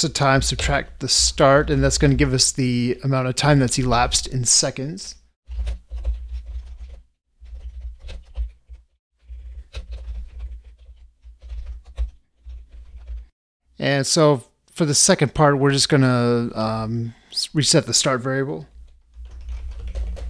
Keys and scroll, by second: 6.0 ctrl+space, 11.9 ctrl+space.